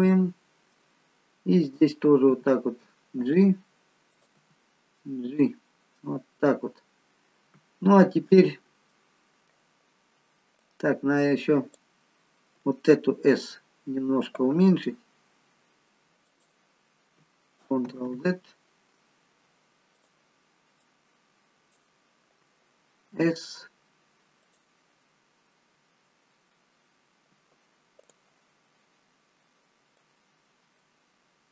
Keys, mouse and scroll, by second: 1.8 click, 2.3 g, 4.3 click, 4.5 g, 6.1 middle click, 8.5-8.9 scroll down 3, 8.9 middle click, 10.6 click, 14.6 s, 17.9 ctrl+z, 20.0 click, 20.9 click, 23.2 s, 28.1 click, 30.0 click.